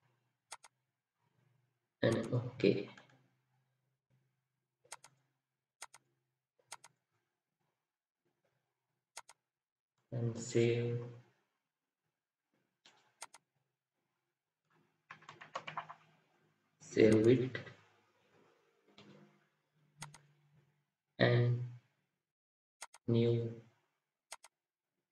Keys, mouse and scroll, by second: 2.5 typing, 2.9 middle click, 7.8-8.5 scroll up 1, 15.2 typing.